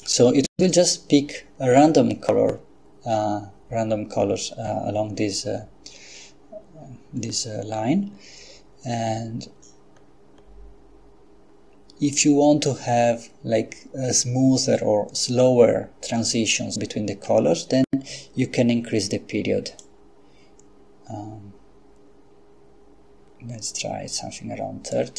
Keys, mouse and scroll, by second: 10.0-10.9 scroll up 2, 19.8-25.1 drag.